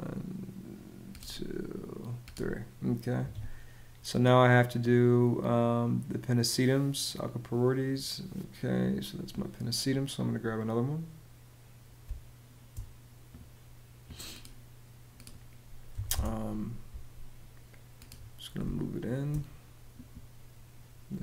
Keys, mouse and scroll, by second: 2.9 Escape, 2.9 ↺, 11.7 space, 15.6 m, 15.8 space, 18.3 space.